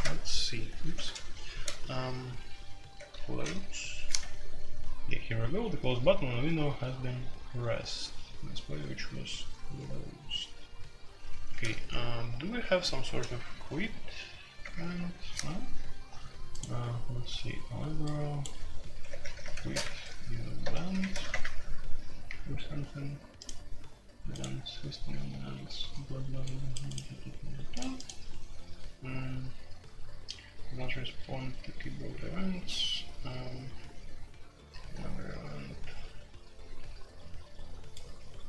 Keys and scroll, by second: 0.8 ctrl+w, 1.5 ctrl+g, 2.9-3.5 typing, 4.1 F3, 8.9 F3, 9.2 F3, 9.5 F3, 10.3 F3, 11.5 ctrl+g, 12.6-13.6 typing, 14.6 Return, 14.8 Return, 14.9 Return, 15.3 Escape, 18.9-21.3 typing.